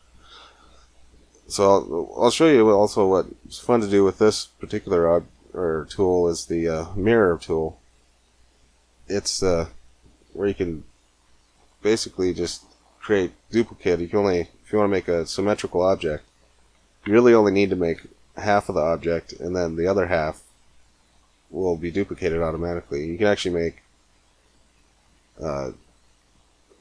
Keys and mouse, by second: 10.3 x.